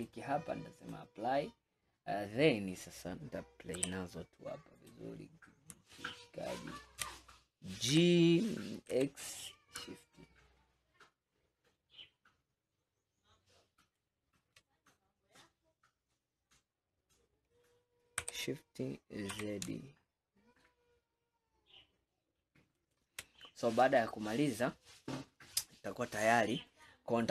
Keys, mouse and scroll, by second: 0.1-1.7 drag, 1.7-3.8 scroll up 2, 3.8 g, 6.0-8.0 shift+middle drag, 8.0 g, 18.2 g, 23.4 scroll down 2, 24.2 scroll down 2, 24.6-25.3 middle drag, 25.3-25.8 scroll down 1, 25.8-27.3 middle drag.